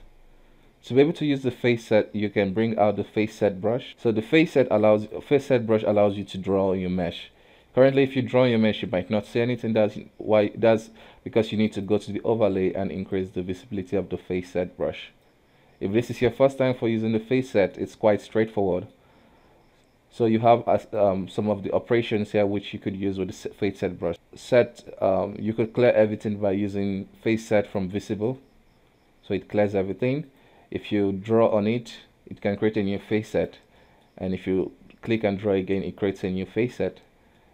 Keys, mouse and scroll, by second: 0.3 scroll up 1, 0.6-2.2 middle drag, 2.2 space, 3.9 alt+m, 4.1 middle click, 4.6-7.6 drag, 7.6-10.7 middle drag, 11.7-14.7 drag, 16.0-20.8 middle drag, 20.8-23.9 drag, 28.4-29.8 middle drag, 29.8 f, 30.9-33.8 drag, 33.8 middle click, 34.4-37.4 drag, 37.4 middle click.